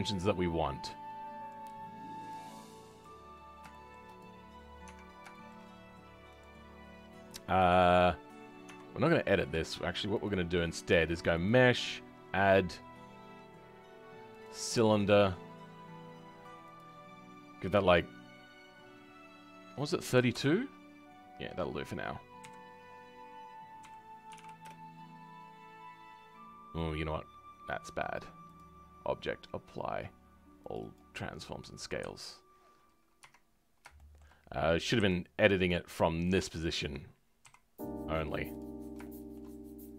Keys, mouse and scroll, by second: 1.5-3.2 drag, 3.2 scroll up 2, 3.7 shift+middle click, 4.1 click, 4.4-4.8 scroll up 2, 5.3-6.3 shift+middle drag, 6.3-8.1 drag, 8.1-8.6 scroll down 5, 8.6 Tab, 14.7-20.3 scroll down 5, 20.3-22.4 drag, 22.4 KP_1, 23.7 r, 30.8-31.9 drag, 31.9 KP_3, 33.1 Tab, 33.5-33.9 scroll up 4, 33.9-35.0 shift+middle drag, 35.0 g, 36.4 shift+middle click, 37.4 s, 38.7 scroll up 2, 39.0-39.9 shift+middle drag.